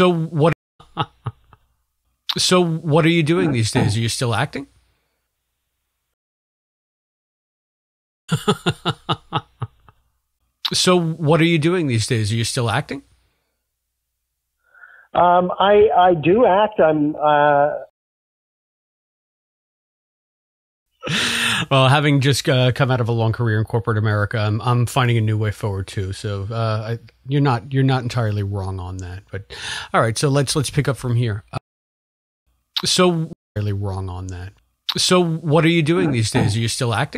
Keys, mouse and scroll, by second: 0.4 space, 0.6 click, 0.7 space, 5.1 click, 6.0 space, 6.6 click, 8.1 click, 8.2 space, 17.8 space, 19.0 ctrl+z, 19.4 ctrl+z, 19.8 ctrl+z, 20.8 space, 22.8 click, 30.0-31.6 drag, 31.5 space, 32.2 ctrl+shift+Delete, 32.4 space, 33.2 space, 33.3 click, 35.2 click, 36.3 click.